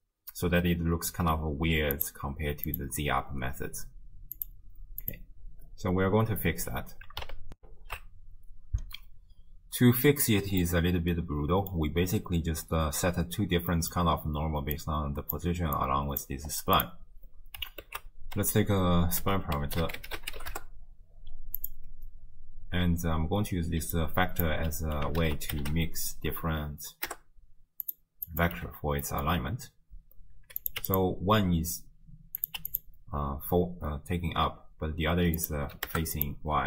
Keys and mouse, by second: 2.0-2.8 drag, 4.4-5.1 drag, 7.6 ctrl+alt+shift+q, 10.7-11.8 drag, 13.7 click, 14.8-15.4 drag, 15.9 click, 16.8-17.6 drag, 17.9 ctrl+a, 23.8 d, 23.9 click, 24.5 d, 24.6 d, 25.1 ctrl+d, 25.2 ctrl+a, 28.3 click, 29.1 click, 30.6 click, 32.4 click, 35.4 click, 36.2-36.6 drag.